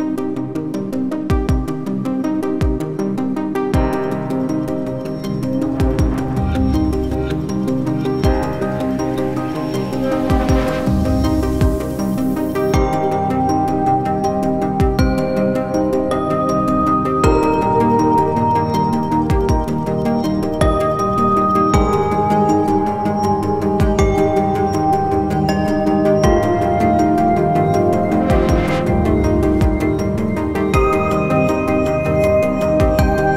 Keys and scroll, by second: 1.9 typing, 4.0 1, 4.9 1, 7.3 1, 11.9 typing, 13.1 `, 13.8 `, 16.4 `.